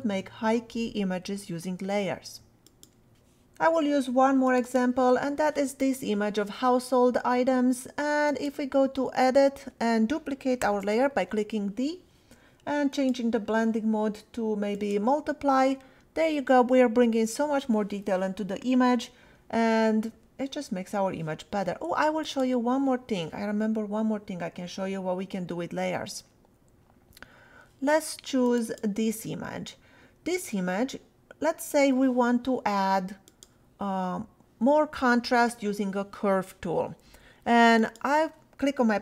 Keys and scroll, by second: 10.6 d.